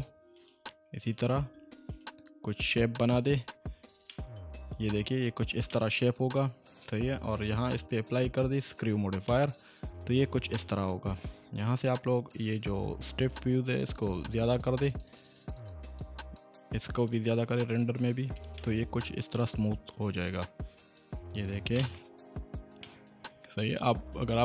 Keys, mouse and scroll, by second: 3.2-3.6 scroll down 1, 4.0 Caps_Lock, 4.1-5.3 middle click, 4.5 Caps_Lock, 5.2 Tab, 5.7 shift+middle click, 5.9-6.3 shift+middle drag, 7.4 click, 7.7 click, 9.3-9.9 middle click, 10.1-10.5 scroll down 1, 10.5-11.2 middle drag, 13.7-16.6 drag, 18.1-18.6 scroll up 2, 20.9-21.6 drag, 22.8-23.8 middle click, 24.0-24.4 scroll down 1.